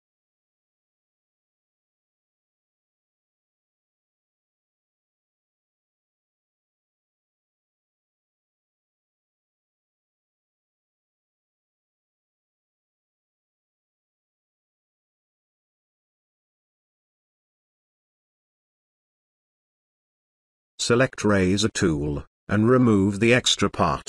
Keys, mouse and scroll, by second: 0.2 click, 0.3 space, 0.9 [, 1.1 [, 1.2-3.1 drag, 5.0 space, 5.1 click, 5.2 space, 5.6-6.7 drag, 11.3 space, 11.5-12.1 ctrl+click, 12.5 [, 12.6 [, 12.7 [, 13.0 [, 13.1-15.3 drag, 17.0 ctrl+space, 17.0-17.7 ctrl+drag, 22.0-23.6 drag.